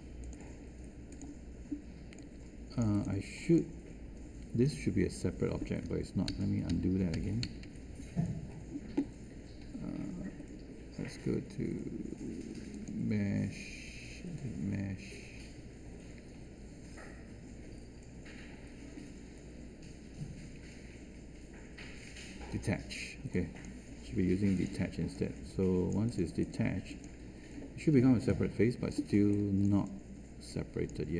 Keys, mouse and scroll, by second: 6.2 shift+z.